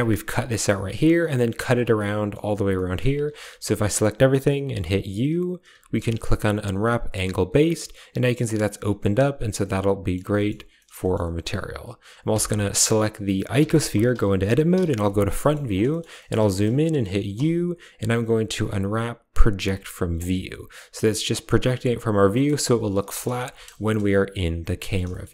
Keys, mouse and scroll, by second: 1.1 middle click, 1.9 middle click, 2.6 middle click, 3.2 a, 3.3 a, 5.6 u, 7.7 click, 9.5 click, 10.3 shift+click, 10.7 middle click, 10.9 shift+click, 12.2 Tab, 12.7 click, 13.5 Tab, 14.6 KP_1, 15.3 shift+middle click, 15.8 shift+middle click, 16.1 shift+middle click, 16.4 shift+middle click, 17.2 u, 22.2 middle click, 22.3 click, 23.0 shift+click, 23.3 Tab, 23.7 KP_0, 24.7 drag, 25.0 shift+click.